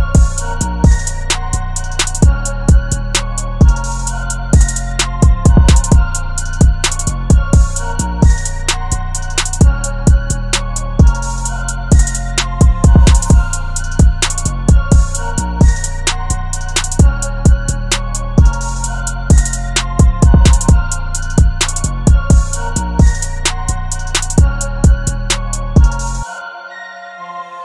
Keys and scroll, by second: 0.0 v, 0.6 t, 2.3-5.1 typing, 10.2 v, 19.6-23.1 typing, 23.9 super+t.